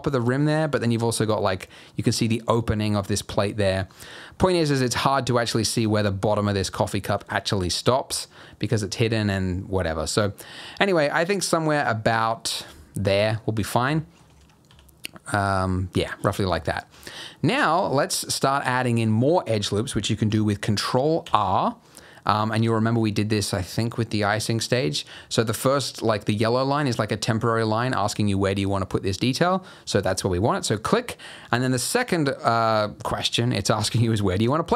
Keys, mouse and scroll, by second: 3.9-4.5 scroll up 3, 4.6 shift+middle click, 5.2-7.1 scroll down 1, 7.1 g, 13.0-13.4 scroll down 3, 13.4-13.8 scroll up 2, 13.9 shift+middle click, 14.3-14.6 scroll up 1, 14.6 s, 16.0-16.4 scroll up 1, 16.6 shift+middle click, 17.2 scroll down 1, 21.2 ctrl+r.